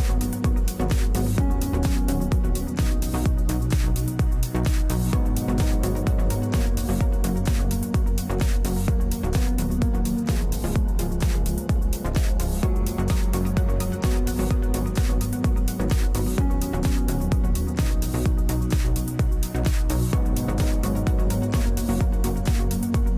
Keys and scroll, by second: 0.0-1.2 typing.